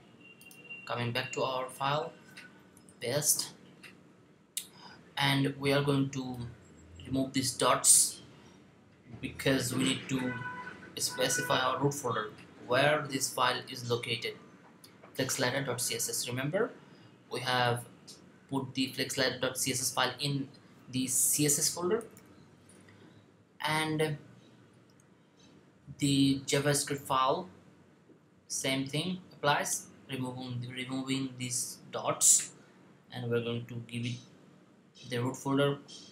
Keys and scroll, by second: 0.9 typing, 2.7 super+v, 21.5-22.5 typing.